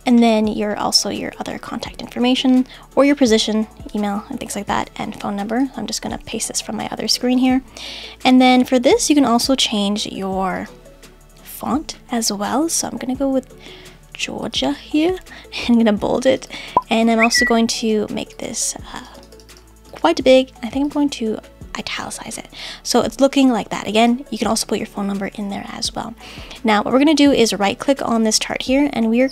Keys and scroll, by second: 4.7 super+c, 6.1 super+v.